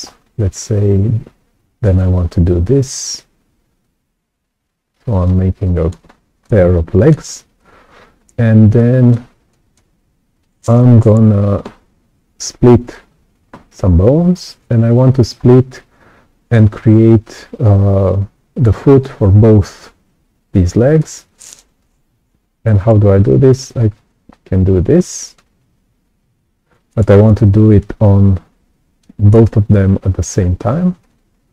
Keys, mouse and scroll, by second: 0.0-0.3 scroll up 2, 0.3 right click, 3.8-5.2 alt+drag, 5.6 right click, 6.0-6.4 scroll up 2, 6.3 right click, 6.4 click, 7.3-7.6 scroll down 2, 7.5-9.1 right drag, 8.1 click, 9.4 right click, 15.3 scroll up 2, 15.6 right click, 15.7 click, 20.9 right click, 20.9 click, 24.0-25.3 ctrl+drag, 26.1 ctrl+z, 27.3-28.9 right drag, 27.4-28.9 drag, 31.0 right click, 31.0 click.